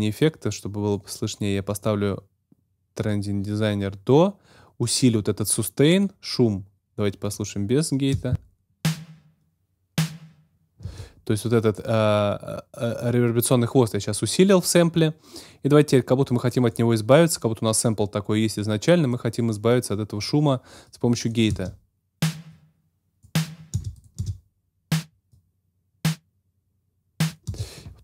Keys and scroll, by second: 8.1 space, 10.8 space, 21.5 space, 23.7 space, 27.4 space.